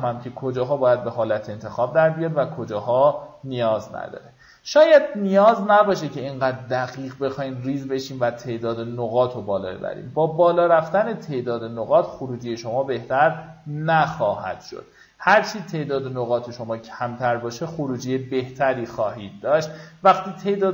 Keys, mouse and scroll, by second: 6.4-6.7 alt+scroll up 1, 7.6-20.7 drag.